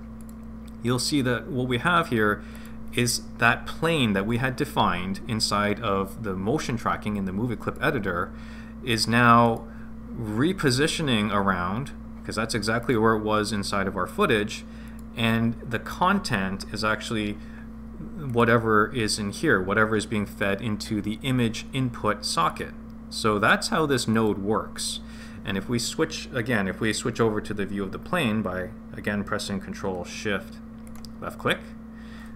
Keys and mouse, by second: 0.1 click, 2.5 click, 7.6 click, 9.4 click, 12.8 click, 14.8 click, 18.2 click, 22.4 click, 24.1 click, 30.8 ctrl+shift+click.